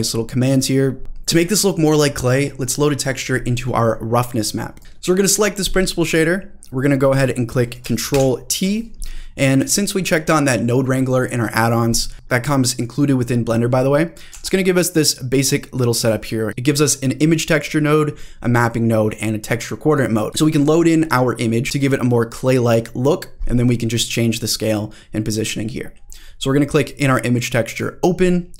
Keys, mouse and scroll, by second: 0.5 middle click, 0.5 scroll down 1, 0.9 scroll up 1, 4.8 Delete, 4.8 click, 6.1 click, 8.1 ctrl+t, 14.3 g, 27.7 click.